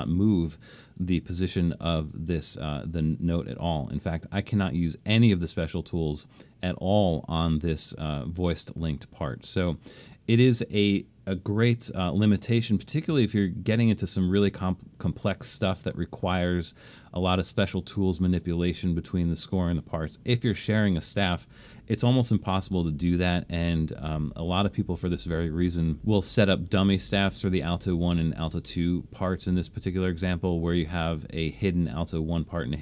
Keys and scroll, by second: 13.1 super+-, 13.8 super+-, 22.0 super+-.